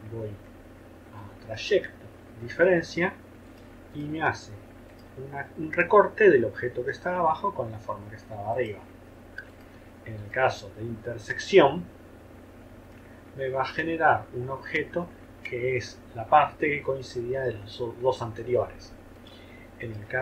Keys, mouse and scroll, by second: 10.2 shift+click, 19.8 shift+click.